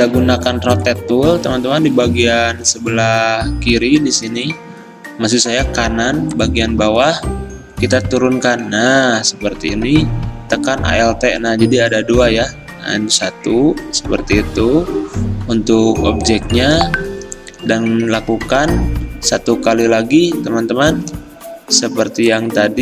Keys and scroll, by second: 21.8 v.